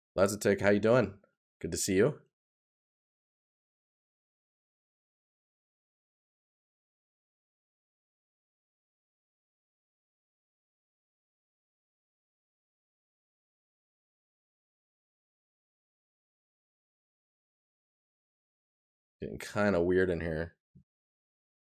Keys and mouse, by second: 0.5 right click, 6.2 right click, 7.7 right click, 14.4 right click, 19.2 right click.